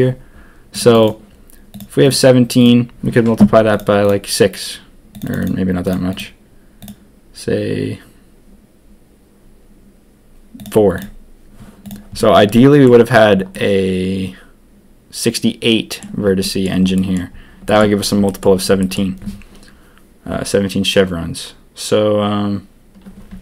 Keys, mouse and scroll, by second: 12.1 middle click, 13.5-15.9 middle drag, 16.4 click, 16.9 click, 17.6 shift+click, 18.2 shift+click, 18.7 shift+click.